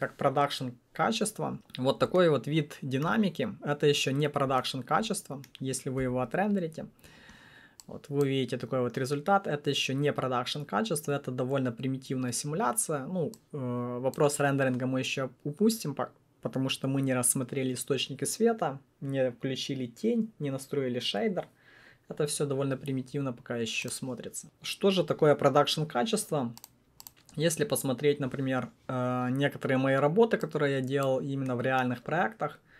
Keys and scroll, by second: 6.0 F9.